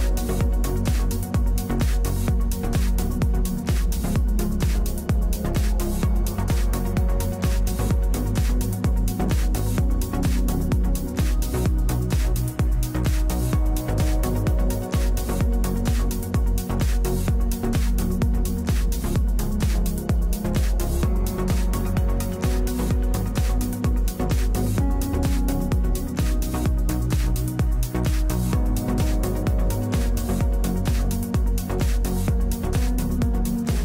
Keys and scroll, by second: 6.3 ctrl+z, 14.7 ctrl+z, 19.0 ctrl+Home.